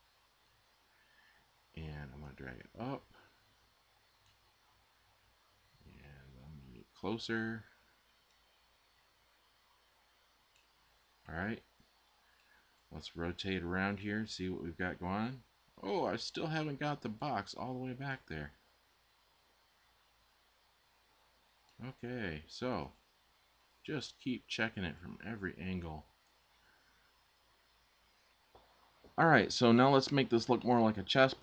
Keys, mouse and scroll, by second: 2.0-3.7 super+drag.